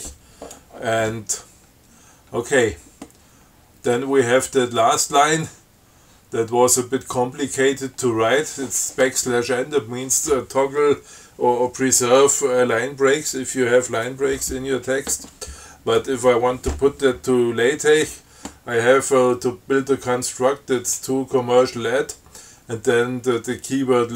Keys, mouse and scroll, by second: 1.9 scroll down 1, 2.4 scroll up 1.